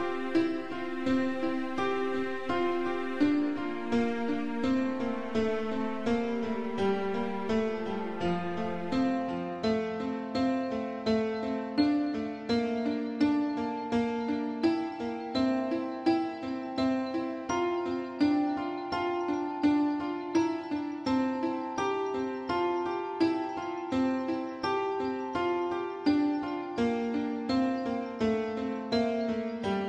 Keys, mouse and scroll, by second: 0.8 middle click, 1.5-3.1 typing, 4.4 click, 4.5 click, 4.7 middle click, 5.1 scroll up 2, 5.7 shift+middle click, 5.9 shift+middle click, 7.5 middle click, 8.0 scroll down 1, 8.3 shift+middle click, 8.5 middle click, 9.7 Right, 10.1 Left, 10.7 typing, 11.9 ctrl+x, 12.3 ctrl+c, 12.7 Left, 13.1 ctrl+v, 13.9 Right, 16.0 click, 16.8 7, 17.7 shift+middle click, 18.2 scroll up 1, 21.0 g, 26.5 click, 26.6 click, 28.5 click, 28.6 click, 29.8 shift+click.